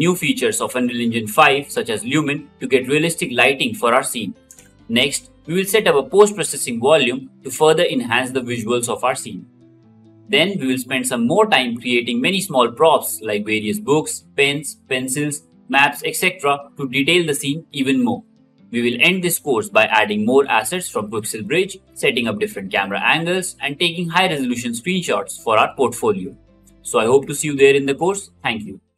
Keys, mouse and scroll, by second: 4.8 ctrl+z, 5.8 ctrl+z, 7.8 KP_6, 8.0 KP_5, 8.3 KP_0, 8.7 Return, 10.6 g.